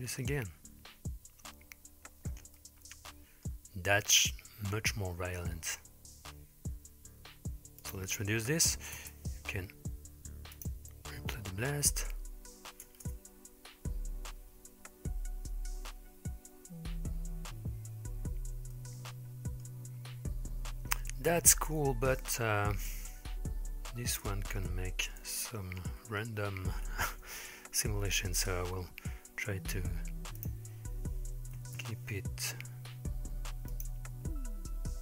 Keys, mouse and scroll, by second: 2.6-3.5 middle drag, 7.9-9.1 drag, 10.6-11.6 drag, 12.9 space, 17.3-18.8 scroll down 3, 18.8-19.7 middle drag, 22.2-23.0 middle drag, 24.7-25.2 shift+middle drag, 25.5 middle click, 26.2-27.7 scroll up 2, 30.4-31.9 drag, 33.8-34.9 drag.